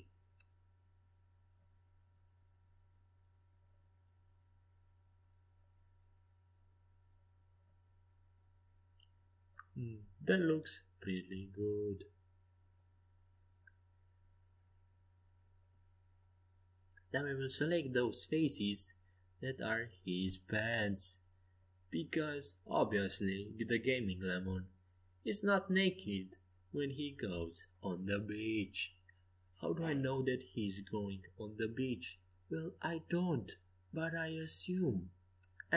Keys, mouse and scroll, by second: 10.9-16.4 right drag, 11.9-13.7 drag, 15.7 Escape, 16.2 a, 17.2 c, 27.0-28.6 middle drag, 28.6 c, 34.6-35.7 drag.